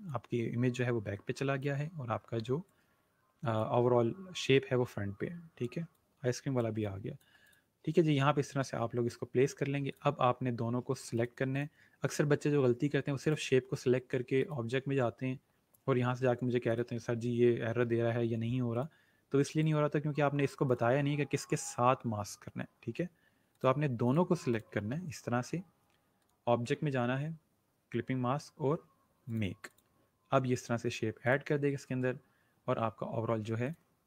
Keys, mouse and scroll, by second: 9.8 click, 16.6 click, 18.7 click, 23.5 click, 29.3 click, 33.6 click.